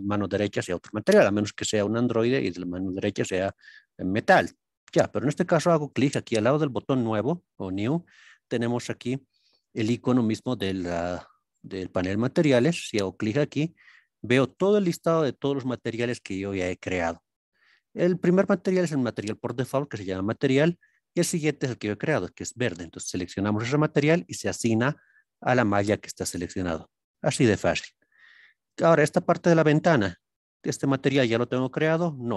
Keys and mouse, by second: 12.8-23.3 drag, 30.9-32.3 drag.